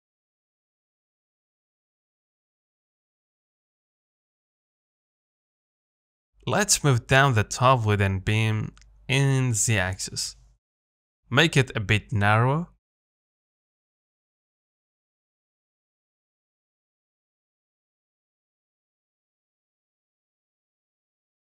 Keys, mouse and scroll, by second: 1.6 z, 1.9 middle click, 2.8-3.4 scroll up 3, 3.4-5.1 middle drag, 5.1-5.5 scroll up 1, 5.5-6.1 scroll down 2, 6.1 middle click, 6.4 Tab, 6.9 click, 7.4 g, 11.1 Tab, 11.6 a, 12.2 s, 13.6 s, 17.8 Tab, 18.3 g.